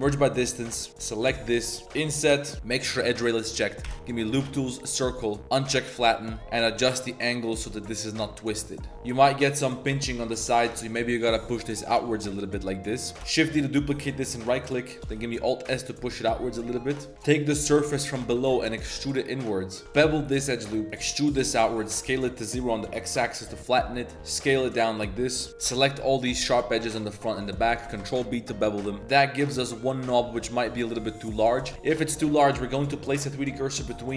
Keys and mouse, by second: 0.0-1.9 typing, 0.5 shift+click, 1.1 ctrl+shift+click, 1.3 click, 3.2 click, 3.8 w, 5.7 click, 6.2 middle click, 6.8-8.9 drag, 8.9 ctrl+z, 8.9 Tab, 9.1 middle click, 9.5 middle click, 9.7 middle click, 9.9 Tab, 10.0 middle click, 10.3 g, 11.7 click, 12.0 g, 13.1 ctrl+z, 13.1 shift+d, 13.4 shift+d, 14.1 3, 15.0 alt+s, 17.1 z, 18.1 click, 18.8 z, 18.8 e, 19.8 ctrl+b, 19.8 z, 19.8 2, 21.0 e, 21.9 s, 23.1 click, 23.7 click, 25.7 alt+shift+click, 26.2 alt+shift+click, 27.0 alt+shift+click, 27.5 click, 27.9 ctrl+b, 29.0 click, 30.2 2, 30.4 click, 31.3 shift+click, 31.7 shift+s, 32.0 click, 32.2 z, 32.7 click, 33.4 z.